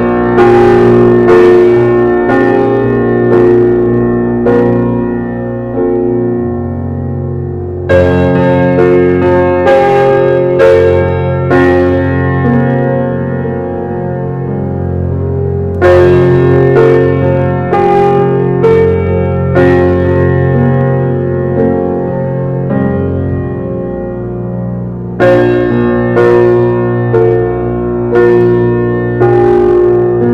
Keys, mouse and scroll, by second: 0.3-0.7 middle drag, 0.7 scroll up 1, 0.9-1.2 scroll down 2, 1.6 shift+middle click, 2.3 click, 5.9 shift+click, 6.3 shift+click, 6.7 shift+click, 7.2 shift+click, 7.5 shift+click, 7.9 shift+click, 8.3 shift+click, 8.7 shift+click, 9.3 shift+click, 10.0 shift+click, 11.1 shift+click, 12.1 g, 15.4-15.8 middle drag, 15.8 click, 16.2-16.5 shift+middle drag, 16.5-17.1 scroll up 2, 17.1 click, 17.3 shift+click, 17.7 shift+click, 18.0 shift+click, 18.4 shift+click, 18.8-19.8 middle drag, 20.4 alt+middle click, 21.2 alt+z, 21.6 click, 22.7-24.0 middle drag, 24.0 scroll up 1, 24.7 ctrl+click, 25.4 ctrl+click, 25.8-26.7 middle drag, 26.7 g, 29.3 alt+z.